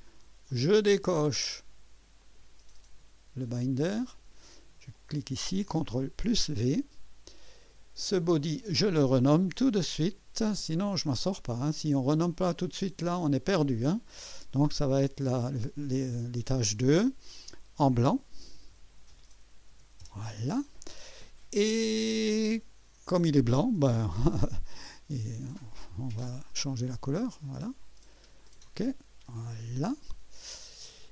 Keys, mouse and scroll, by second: 0.5-1.4 drag, 2.2 click, 4.0 click, 5.0 click, 6.0 v, 8.6 click, 10.1 F2, 11.7 click, 12.1-13.5 drag, 15.2 BackSpace, 16.3 BackSpace, 18.4-20.2 typing, 24.3-31.1 ctrl+d, 25.6 click, 27.3 click, 28.5 click, 29.4 click.